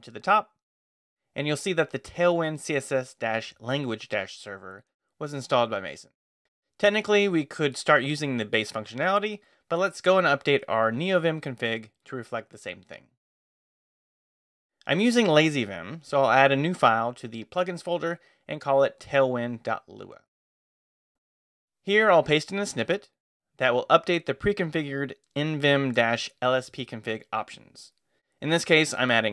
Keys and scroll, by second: 9.4 q, 9.8 Escape, 14.6 Return, 15.0 space, 15.1 e, 15.8 j, 15.9 Return, 16.2 j, 16.7 Return, 18.3-21.3 typing, 22.6 space, 22.7 e, 23.4 i, 24.1 super+v.